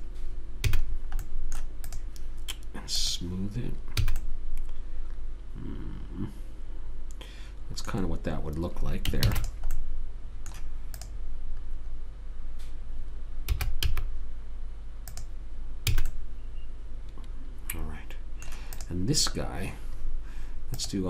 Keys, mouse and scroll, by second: 1.0 a, 1.2 middle click, 2.2-4.5 drag, 4.4 a, 4.5 middle click, 9.6 ctrl+s, 11.4 click, 13.9 s, 16.3 a, 16.4 click, 19.1 click.